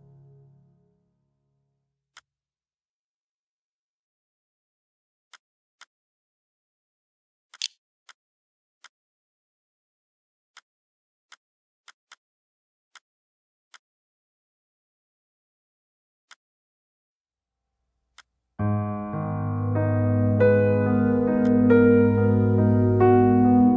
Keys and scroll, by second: 7.0 4, 7.4 3.